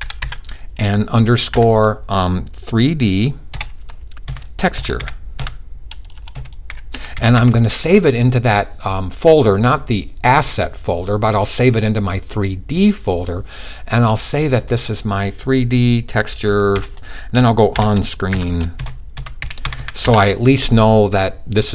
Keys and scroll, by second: 1.1 typing, 3.1-7.0 typing, 16.7-19.5 typing.